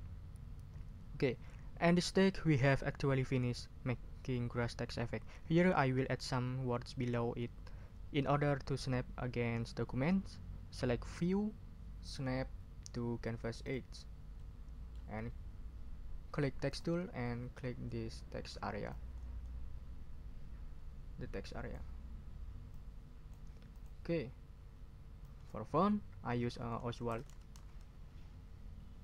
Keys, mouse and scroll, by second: 12.0 click, 13.6 click, 14.4 middle click, 16.6 click, 17.2 middle click, 18.0 ctrl+scroll down 2, 18.9-21.9 drag, 22.7 click, 23.7 click, 25.2 click, 26.9-28.0 typing.